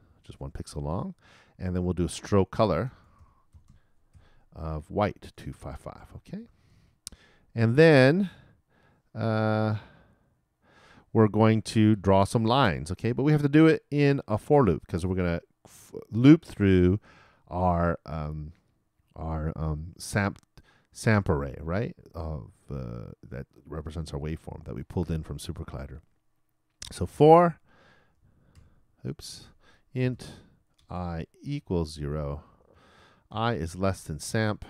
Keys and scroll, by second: 0.0-0.4 typing, 4.0-6.9 typing, 27.6-30.0 typing, 33.5 shift+|, 33.7 shift+,, 34.2 shift+s.